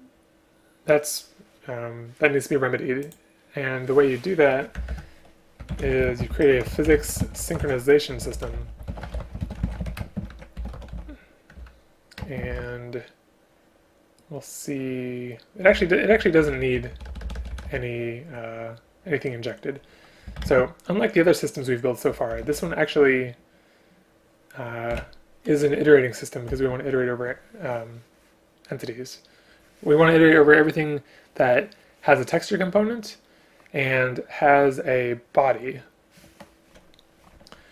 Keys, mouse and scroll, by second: 4.8 Return, 5.0 Return, 6.2 space, 10.1 space, 11.7 Return, 12.3 space, 15.8 BackSpace, 16.2 BackSpace, 20.5 shift+space, 25.0 Return.